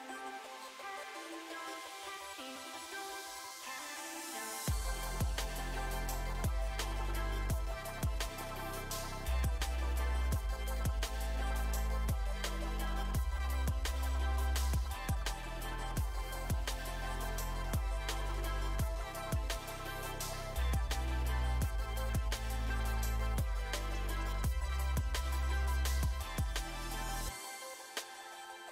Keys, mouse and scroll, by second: 0.1 middle click, 1.3 ctrl+r, 3.6 ctrl+r, 6.5-7.5 middle drag, 8.0 ctrl+r, 10.1 ctrl+r, 12.0-13.0 middle drag, 13.2-14.4 middle drag, 14.4 ctrl+r, 16.1-17.2 middle drag, 17.1 ctrl+r, 18.3 Tab, 18.5-21.6 drag, 18.7-19.7 middle drag, 20.8-22.4 middle drag, 21.8 click, 21.9 Tab, 22.6 ctrl+r, 25.2 Tab, 25.4 click, 25.7-26.7 middle drag, 28.1-28.7 middle drag.